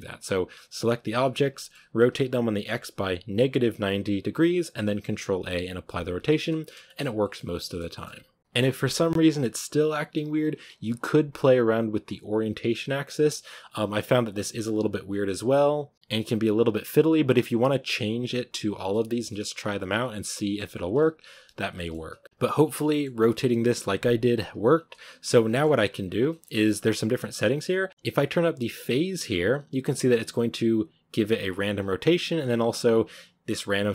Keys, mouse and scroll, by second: 0.4 right drag, 0.9-1.4 shift+right drag, 1.4 middle drag, 1.6-2.1 scroll up 1, 6.2 shift+middle click, 6.3 a, 6.5 middle drag, 6.6 shift+scroll down 1, 6.7 shift+middle drag, 7.0 scroll up 1, 7.1-8.4 middle drag, 8.4 right click, 9.2-20.8 shift+middle drag, 20.8 scroll down 1, 20.8 a, 21.6 scroll down 1, 21.6-22.5 shift+middle drag, 22.5 scroll down 1, 22.8-24.6 middle drag, 24.6-24.9 scroll up 1, 25.4 shift+middle click, 25.9-26.9 scroll up 4, 26.1 shift+middle click, 27.8 click, 28.5-33.9 drag.